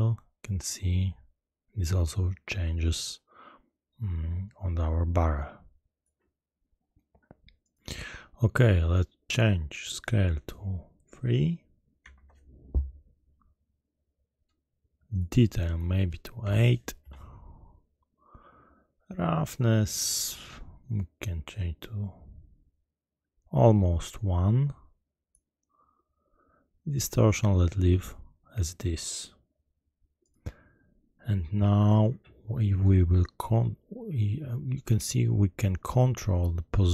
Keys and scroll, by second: 12.1 Return, 17.0 Return.